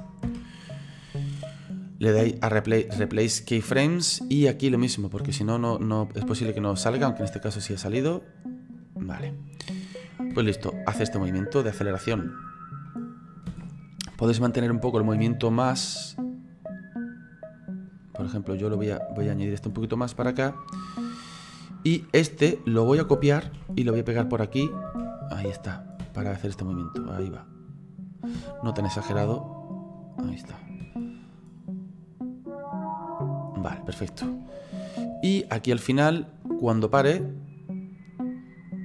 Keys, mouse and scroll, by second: 1.4 right click, 4.5 click, 8.4 right click, 9.9 click, 10.3 space, 12.5-12.9 scroll down 4, 13.0 middle click, 13.5 space, 14.9-18.9 drag, 18.9 right click, 22.6 right click, 23.5 ctrl+c, 24.2 click, 24.9 ctrl+v, 25.7 click, 26.0 space, 28.4 space, 29.0 right click, 30.7 click, 30.8 space, 33.6 scroll down 3, 34.4-37.5 shift+middle drag.